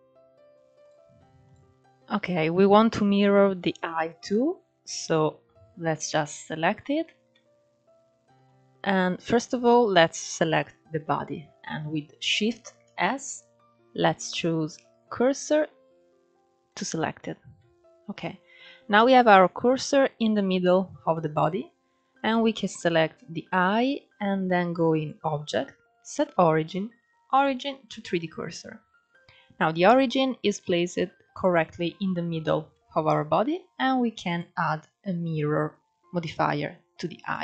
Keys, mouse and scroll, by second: 0.0 scroll up 2, 0.5 drag, 1.1 click, 1.6-1.9 scroll down 2, 1.9 scroll up 3, 4.0-6.6 middle drag, 6.6-7.0 scroll down 2, 7.0-9.1 middle drag, 9.1 click, 12.5 shift+s, 17.3-21.8 middle drag, 21.8 click, 24.6-27.6 drag, 27.8-33.9 middle drag, 33.9-37.1 drag.